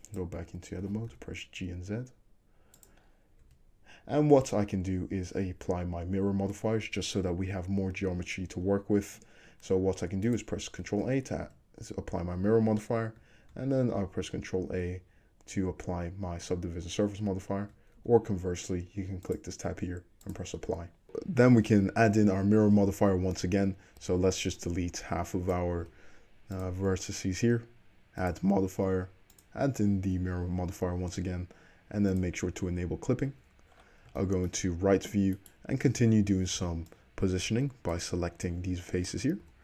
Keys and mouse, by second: 0.9 g, 2.9-4.9 middle drag, 3.5 Tab, 10.3 click, 11.1 ctrl+a, 13.7 ctrl+a, 16.6-17.8 middle drag, 18.1 ctrl+z, 19.3-21.0 drag, 21.0-24.0 middle drag, 22.4 1, 24.1 alt+z, 24.6-32.2 drag, 25.8 x, 32.2-35.4 middle drag, 34.2 shift+`, 35.4 click, 35.5-39.6 middle drag, 36.6 b, 39.4 g.